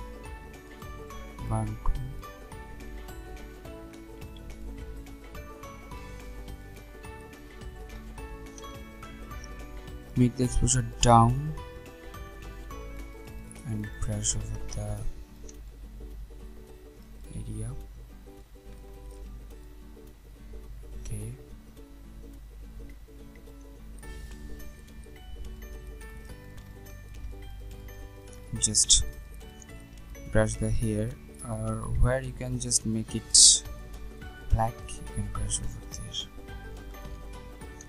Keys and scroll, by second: 8.6 ctrl+alt+z.